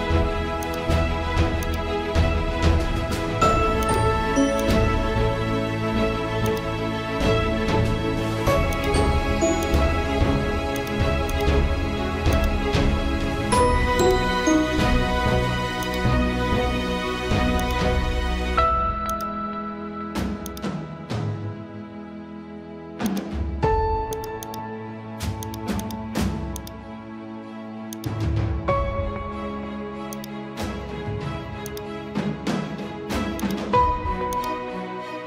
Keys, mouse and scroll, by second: 2.9 ctrl+x, 3.8 click, 5.3 v, 6.5-8.7 drag, 14.0 click, 14.9 ctrl+t, 15.8-31.6 drag, 35.0 ctrl+z.